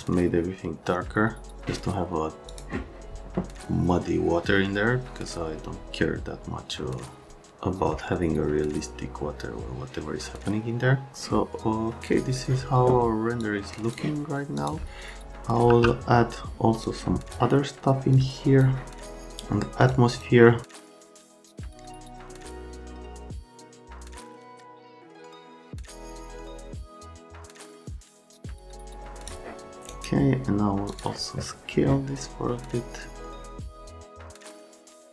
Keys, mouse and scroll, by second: 2.5 click, 13.4 click, 14.6 click, 15.7 9, 16.8 click, 18.1 click, 19.8 click, 20.1 click, 20.6 click, 20.8 right click, 21.4 click, 21.7 click, 22.4 click, 24.0 scroll, 24.3 click, 24.7 click, 29.8 scroll down 1, 30.9 middle click, 33.9 shift+d, 34.1 shift+d, 34.8 right click.